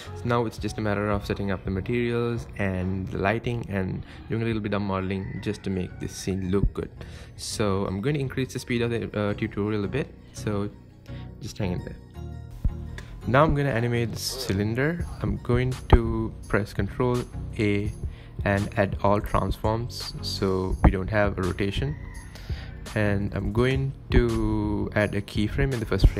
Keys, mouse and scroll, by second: 6.9 space, 9.0 click, 10.2-12.6 drag, 13.6 click, 15.9 ctrl+a, 19.1-21.8 drag, 21.8 ctrl+z, 22.0-24.4 drag, 24.4-25.1 right drag, 25.1 space.